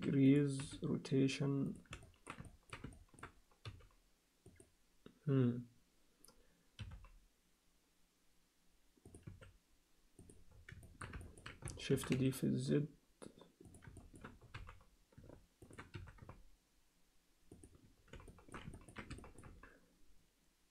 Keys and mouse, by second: 0.6 s, 2.2 alt+middle click, 2.5 ctrl+alt+middle click, 3.0 alt+shift+middle click, 4.5 g, 6.8 r, 9.2 s, 10.9 alt+shift+middle click, 11.3 ctrl+alt+middle click, 12.0 shift+d, 14.0 alt+shift+middle click, 14.5 g, 15.9 s, 18.3 alt+shift+middle click, 18.8 ctrl+alt+middle click, 19.3 alt+shift+middle click.